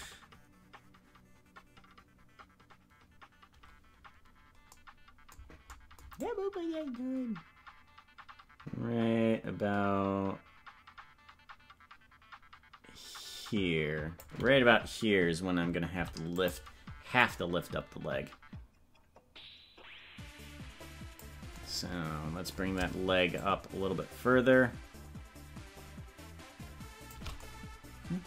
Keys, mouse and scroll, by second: 6.2-14.3 drag, 17.2-21.3 drag, 23.3-27.1 shift+drag.